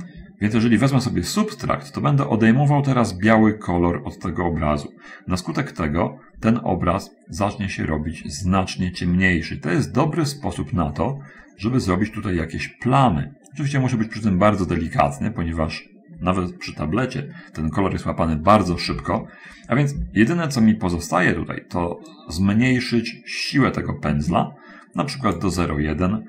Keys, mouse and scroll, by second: 6.1-6.6 scroll up 1, 7.6-15.9 drag, 18.9 ctrl+z, 22.4-25.8 drag.